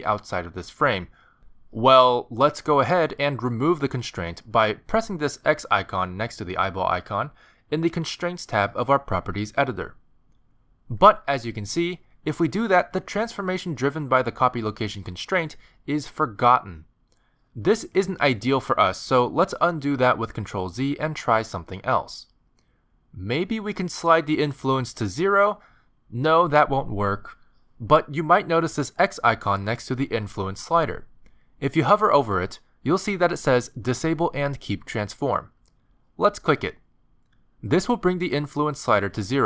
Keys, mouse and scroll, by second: 1.3 middle click, 1.8 shift+middle click, 10.1 click, 11.7 middle click, 13.7 g, 14.3 middle click, 15.8 middle click, 17.4 middle click, 20.3 ctrl+z, 21.3 middle click, 24.3 middle click, 25.4 click, 30.0 click, 37.1 click.